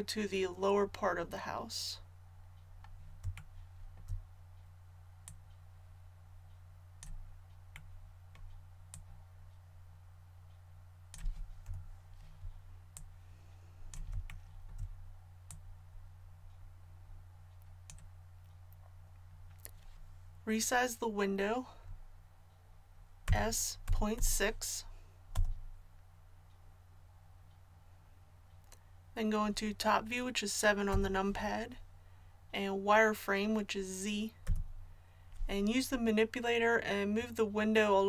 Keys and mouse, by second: 5.2-7.1 drag, 7.1-8.9 middle drag, 8.9-11.7 drag, 11.7 KP_3, 13.0-15.1 drag, 15.5-23.2 drag, 23.2 s, 30.9 KP_7, 34.4 z.